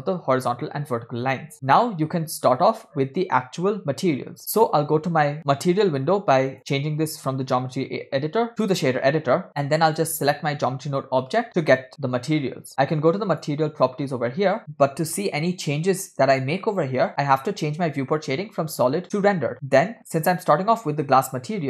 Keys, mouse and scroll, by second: 1.7 click, 6.5-8.7 drag, 9.9-10.2 drag, 13.3 click, 15.8-16.5 scroll down 2, 19.5-20.5 scroll up 5.